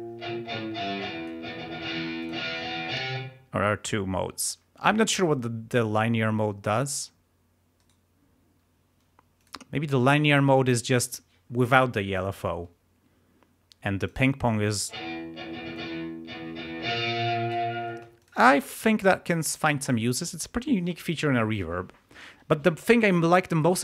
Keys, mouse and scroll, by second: 2.2 click, 3.1 space, 7.7 right click, 9.3 click, 14.0 click, 14.2 click, 14.8 space, 15.7-17.7 drag, 17.9 space, 18.1 click.